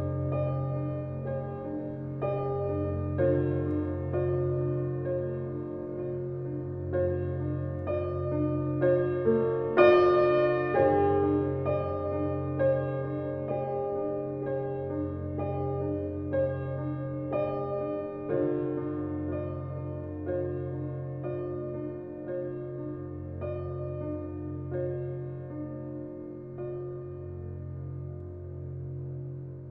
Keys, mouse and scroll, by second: 5.5 ctrl+shift+i, 6.9 click, 8.1 alt+BackSpace, 9.5 ctrl+d, 13.4 click, 14.0 shift+click, 15.6 ctrl+g, 16.5 click, 21.0 click, 26.4-29.7 drag.